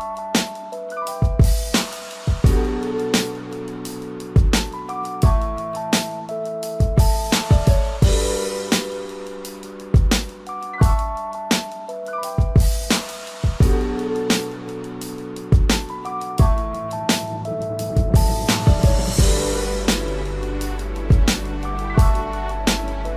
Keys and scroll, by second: 0.8 ctrl+=.